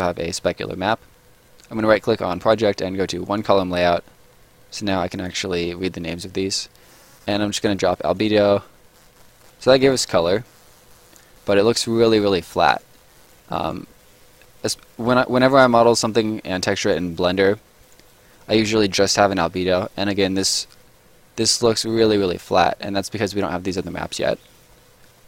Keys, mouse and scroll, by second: 1.8 right click, 3.2 click, 9.0 middle click, 9.1 scroll up 1, 9.4 right click, 9.6 scroll down 1, 9.8 middle click, 10.3 scroll up 1, 10.4 middle click, 11.2 right click, 11.7 middle click, 12.4 scroll down 1, 12.6 right click, 12.9 scroll down 1, 13.0 middle click, 13.5 right click, 13.8 scroll down 1, 14.0 middle click, 14.6 right click, 14.8 scroll down 1, 14.9 middle click, 16.4 scroll down 1, 16.7 right click, 17.1 scroll down 1, 17.5 scroll up 1, 17.8 right click, 18.0 scroll up 1, 18.3 middle click, 19.4 right click, 19.7 middle click, 24.0 scroll down 1, 24.2 middle click.